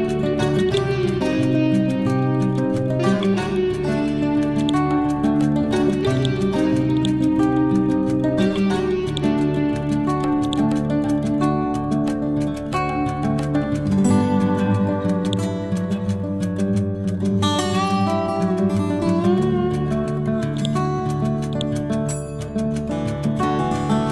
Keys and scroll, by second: 22.9 F12, 23.6 2, 23.8 0, 24.0 Return.